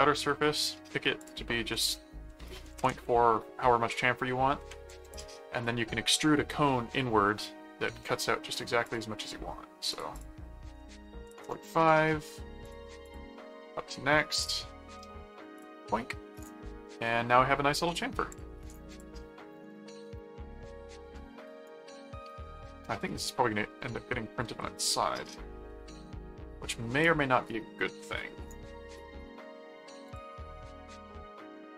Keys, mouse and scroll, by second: 0.5 click, 1.2 click, 5.1 click, 8.8 click, 9.9 click, 12.6 click, 14.4 click, 15.6 click, 17.0 middle click, 18.3 click, 18.9 click, 19.2 middle click, 21.1-26.8 middle drag, 28.9 middle click, 30.0 click, 30.4-31.7 middle drag.